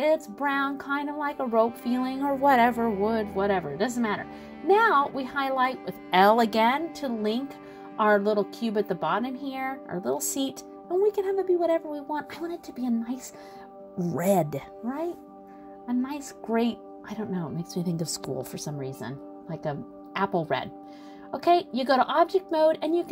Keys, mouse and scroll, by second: 0.2 scroll down 2, 0.6 middle click, 1.3 middle click, 2.0 click, 4.5 l, 8.1 g, 12.7 click, 13.3 scroll down 1, 13.4 middle click, 15.7 middle click, 15.7 scroll down 1, 20.9 click, 22.3 click, 22.7 middle click.